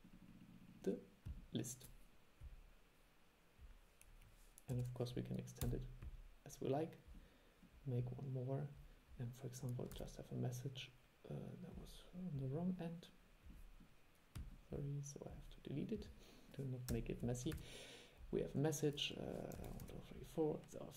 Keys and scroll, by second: 10.0 super+2, 17.6 super+2.